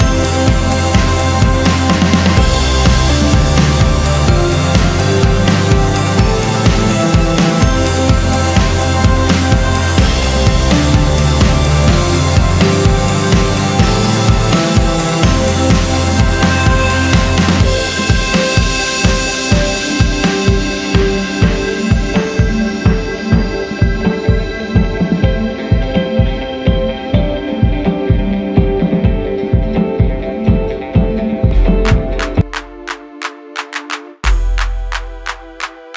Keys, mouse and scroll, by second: 0.5 ctrl+click, 2.0-2.5 scroll down 1, 2.5-2.9 scroll up 1, 3.2 ctrl+click, 5.0-5.4 scroll down 1, 5.4 scroll up 1, 6.6 ctrl+r, 7.7 ctrl+click, 8.7-9.1 scroll down 1, 9.8 ctrl+click, 11.6 ctrl+click, 12.2 ctrl+r, 13.3-13.6 scroll down 1, 13.6 click, 14.0 scroll down 1, 14.3-14.7 scroll up 1, 14.8 double click, 18.4-18.9 scroll down 1, 20.4 click, 21.2 click, 23.5 F4, 24.6 F9, 27.3 ctrl+o, 28.1 scroll down 1, 29.3 click, 35.2 click.